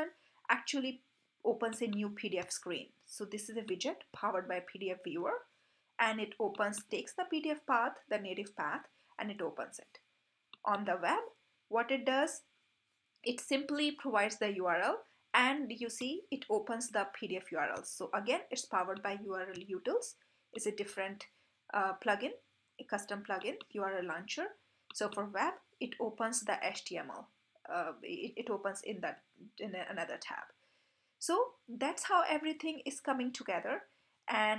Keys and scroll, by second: 4.0 super+b, 19.1 super+b.